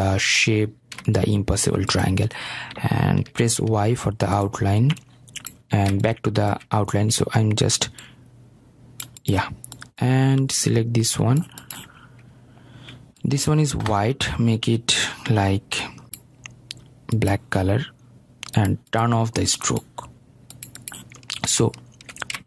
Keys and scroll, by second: 4.2 ctrl+y.